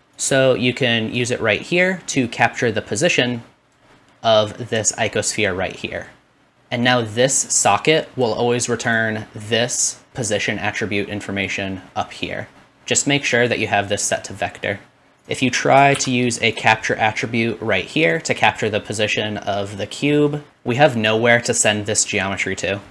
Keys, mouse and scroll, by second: 0.0-6.5 drag, 6.5 middle click, 6.9-9.0 drag, 9.0-13.4 middle drag, 13.4-15.3 drag, 15.3-18.3 middle drag, 16.0 shift+d, 18.3-22.9 drag.